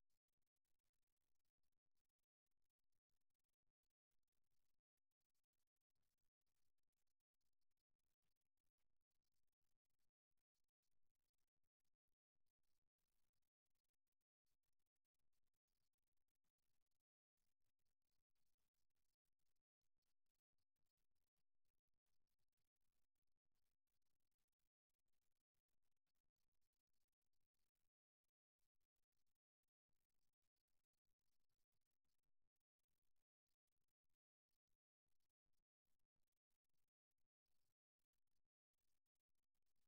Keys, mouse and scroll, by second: 1.4-2.6 middle drag, 3.0 a, 8.1-10.8 middle drag, 10.8-12.7 drag, 13.6-18.1 middle drag, 18.1-20.1 right drag, 20.3-21.3 drag, 21.3-24.4 middle drag, 24.4 g, 26.5-27.7 middle drag, 28.4-30.3 right drag, 30.6 g, 31.7 click, 32.3 right click, 32.6 g, 36.9 g, 39.3-39.8 middle drag.